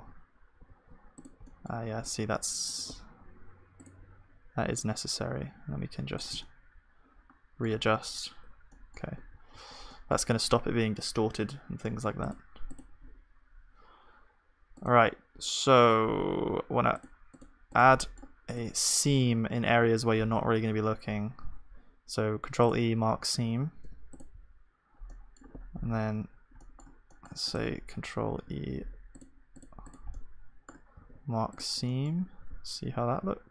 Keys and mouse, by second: 0.7 ctrl+a, 1.5-6.5 middle drag, 6.4 click, 6.4 right click, 6.6-12.7 middle drag, 6.6 right click, 9.2 Tab, 9.5 ctrl+s, 12.7-22.7 drag, 22.7 ctrl+e, 23.2 a, 28.3 ctrl+e, 28.3-32.4 drag, 32.4-33.5 middle drag, 32.4 a, 33.2 u.